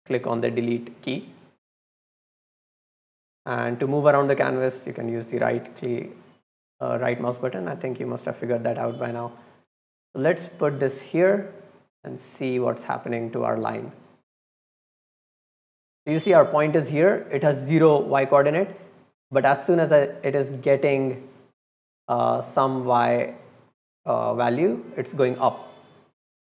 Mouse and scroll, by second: 1.8-2.5 right drag, 3.1-3.6 drag, 3.8-4.3 scroll down 1, 4.3 right click, 4.8 right click, 5.2 right click, 6.3-6.7 drag, 7.1 middle click, 7.4-7.9 drag, 8.6 click, 9.3 drag, 10.1-11.0 drag, 11.7 scroll down 1, 12.0 scroll up 1, 13.6-15.8 drag, 19.8-20.6 right drag, 21.1 click, 21.9 click, 22.7 middle drag, 23.0 middle click, 23.6 middle click, 24.1 middle click, 24.3 middle click, 25.4-26.4 drag.